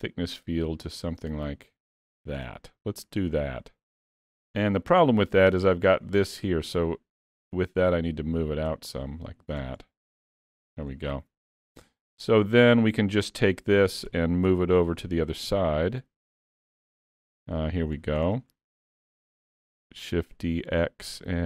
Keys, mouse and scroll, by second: 2.8 middle click, 4.0 middle click, 7.8 click, 9.9 scroll down 2, 10.5 alt+a, 10.9 middle click, 12.8 click, 14.2 KP_7, 15.5 z, 17.6-18.6 shift+scroll up 4, 17.6 shift+middle click, 18.3 shift+middle click, 19.4 shift+d.